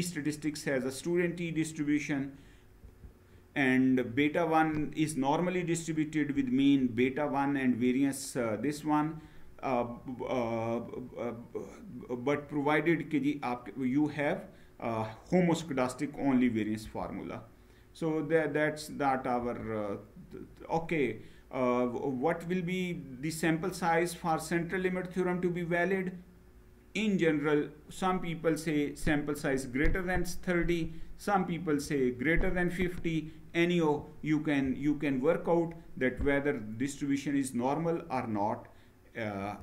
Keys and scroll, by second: 2.7 Down, 16.7 Down, 19.1 Down, 39.2 Down.